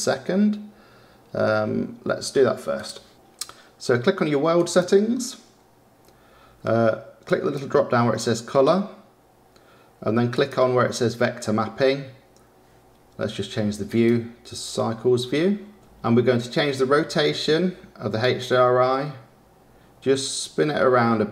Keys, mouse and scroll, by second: 4.5 click, 7.2 click, 10.3 click, 14.4 click, 15.7 click, 18.3-21.3 drag.